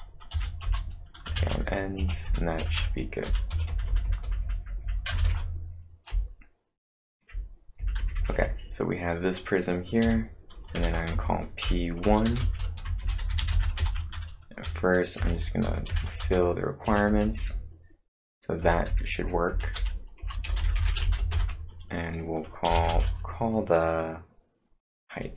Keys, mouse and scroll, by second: 0.3-5.7 typing, 0.6 Return, 6.8-17.6 typing, 19.0-21.8 typing, 20.2 Return.